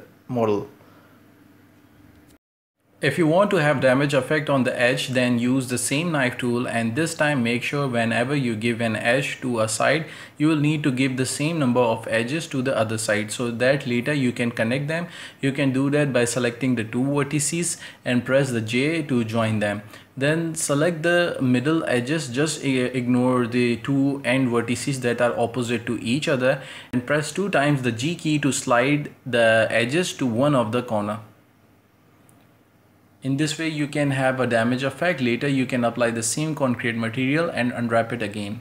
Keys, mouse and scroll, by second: 12.3 click, 12.8-13.5 drag, 13.5 right click, 13.8 shift+right drag, 14.1 j, 14.4-15.5 right drag, 15.5 ctrl+z, 15.7 ctrl+z, 16.1 shift+right click, 16.5 j, 16.7 right click, 17.1 shift+right click, 17.3 j, 18.1-18.7 right drag, 18.7 j, 19.5-20.5 right drag, 20.5 c, 23.6-24.4 middle drag, 24.4 scroll up 1, 24.6 g, 25.5 g, 27.4 c, 30.3 c, 31.6 ctrl+space, 32.2 u, 33.6 s, 34.1 g, 34.6-35.5 scroll up 1, 35.5 click, 35.8 click, 37.5 ctrl+space, 38.3 ctrl+space.